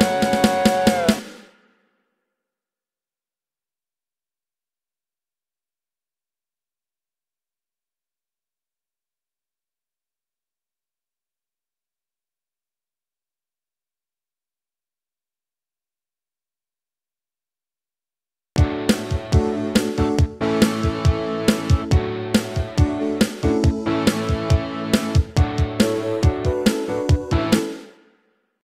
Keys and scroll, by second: 1.2 space, 18.4 space, 20.3 ctrl+s, 27.5 space.